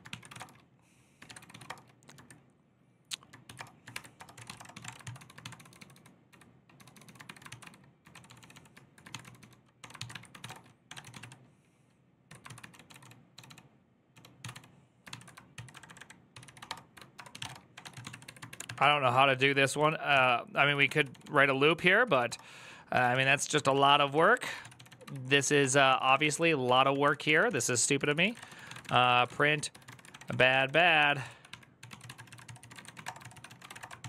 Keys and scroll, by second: 31.0 ctrl+c, 31.0-34.0 typing, 33.8 ctrl+t.